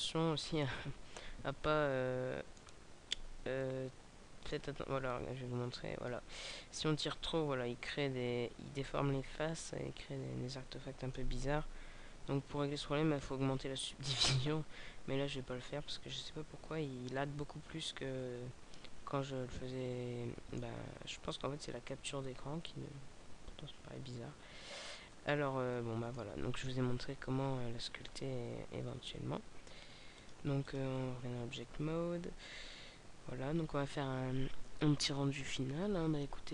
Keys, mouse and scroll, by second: 1.3 scroll up 1, 1.5 middle click, 3.0 scroll down 1, 3.5 middle click, 5.0 click, 6.3 middle click, 12.1 ctrl+z, 15.3 middle click, 21.2 middle click, 25.1 scroll up 1, 25.7 middle click, 25.7 scroll up 2, 26.8 KP_0, 27.9-28.4 scroll down 3, 30.1 click.